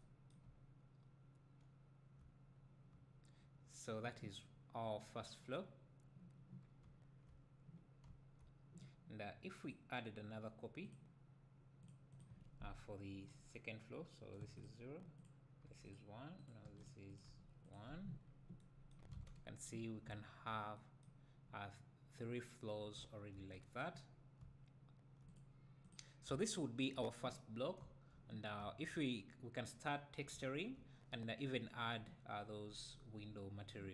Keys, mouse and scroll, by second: 2.6-2.9 scroll down 2, 3.0 `, 5.8-6.7 scroll down 2, 6.7 scroll down 1, 6.8 `, 9.6-14.6 drag, 14.6 KP_0, 15.2 click, 16.4-17.7 drag, 16.8 KP_0, 18.2-18.6 scroll down 1, 19.2 alt+a, 19.8 scroll up 1, 20.1 `, 23.0 `, 24.1 scroll down 1, 24.4 `, 25.3 click, 25.8 click, 26.3 `, 27.5 scroll down 2, 27.8 `, 29.6-30.3 scroll up 2, 30.3 `.